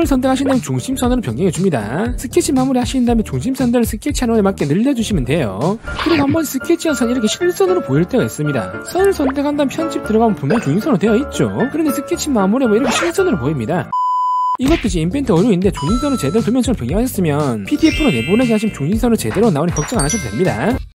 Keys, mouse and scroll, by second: 0.0 click, 0.6 click, 1.0 scroll up 2, 1.2 scroll down 2, 1.8 click, 2.1 click, 2.3 click, 3.2 click, 3.8 scroll down 1, 3.9 scroll up 2, 4.1 click, 4.3 middle click, 5.0 click, 7.5 middle click, 9.3 right click, 10.4 click.